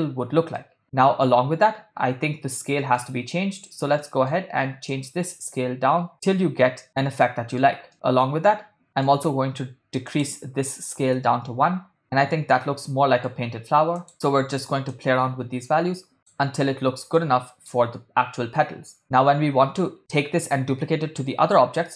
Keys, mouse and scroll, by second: 0.6 middle drag, 0.9-1.5 ctrl+middle drag, 2.9-3.4 middle drag, 4.0 middle click, 4.9-6.8 drag, 6.8-7.1 middle drag, 7.4 middle click, 8.0-9.0 middle drag, 10.1-11.2 drag, 12.0-13.6 middle drag, 14.1 middle click, 14.9-16.5 drag, 17.5-17.9 middle drag.